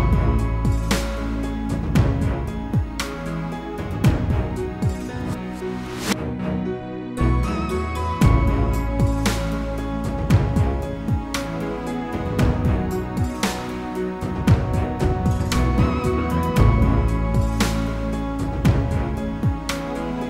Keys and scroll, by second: 11.1 ctrl+c, 11.6 ctrl+f.